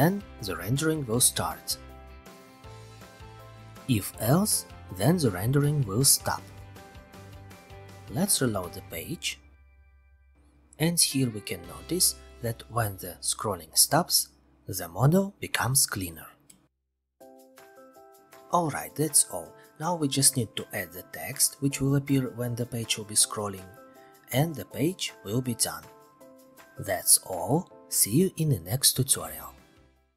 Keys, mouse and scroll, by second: 1.2 click, 3.6 click, 5.7-6.6 scroll, 7.3 click, 7.5 ctrl+r, 9.2-11.4 scroll, 11.5-12.9 scroll, 12.9-14.3 scroll, 14.4-15.6 scroll, 15.6-16.8 scroll, 16.8-17.8 scroll, 17.8-20.2 scroll, 23.5-28.1 scroll.